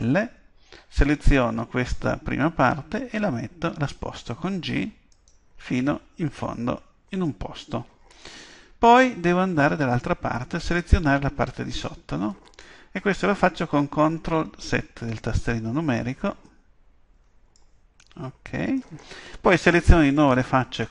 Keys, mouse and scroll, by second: 1.2 g, 9.3-12.4 middle drag, 16.4-20.9 middle drag.